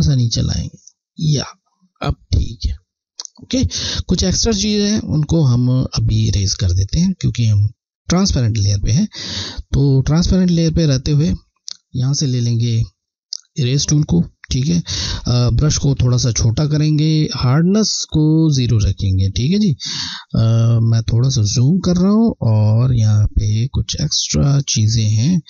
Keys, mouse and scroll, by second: 3.9 alt+scroll down 1, 4.0 scroll, 8.1 scroll, 8.7 alt+scroll down 1, 8.8 scroll, 11.4-11.7 alt+scroll down 1, 12.8 click, 15.8 [, 17.5 click, 19.7 scroll, 20.9 scroll, 21.1 scroll, 22.5 click, 22.5 alt+scroll up 1, 22.7 click, 23.0 click.